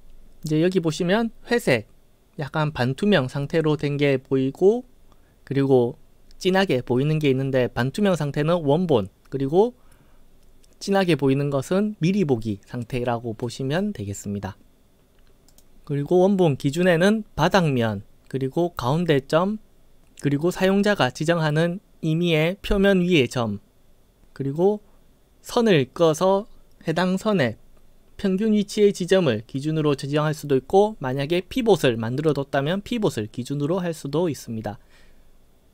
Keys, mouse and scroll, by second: 15.5 click.